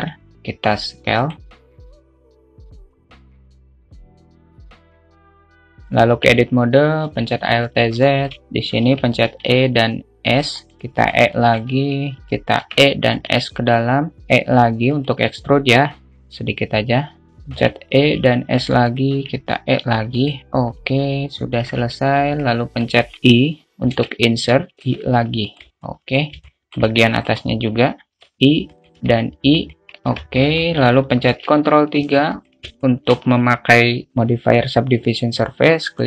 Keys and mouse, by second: 0.2 s, 1.6 s, 1.7 g, 2.1 s, 2.6 click, 3.0-4.4 drag, 4.4 s, 4.7 s, 4.9 s, 5.4 click, 6.4 Tab, 7.5 alt+z, 7.7 click, 8.3 shift+middle click, 9.2 e, 10.7 e, 11.6 alt+shift+middle click, 13.0 e, 14.3 e, 16.3-17.6 drag, 17.8 e, 19.4 e, 22.2 alt+z, 22.2 alt+middle click, 24.3 i, 25.1 i, 26.1 middle click, 26.7 alt+shift+middle click, 28.2 3, 28.9 i, 30.0 i, 30.6 Tab, 30.9 alt+middle click, 31.9 ctrl+3, 32.4 `, 33.1-33.5 shift+middle drag.